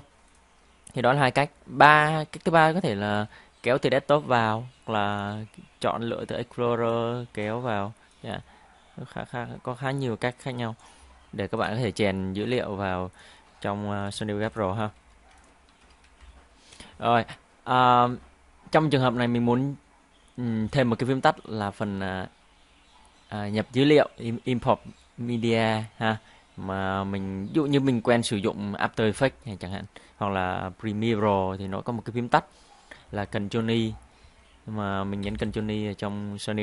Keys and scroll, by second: 15.0 Delete, 16.2 Home, 33.8 ctrl+i, 35.5 ctrl+i.